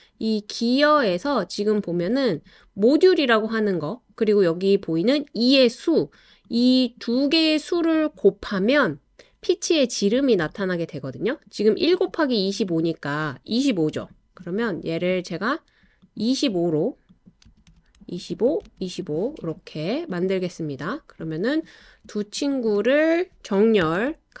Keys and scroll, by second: 12.4 typing, 17.2-19.1 typing, 23.8 l.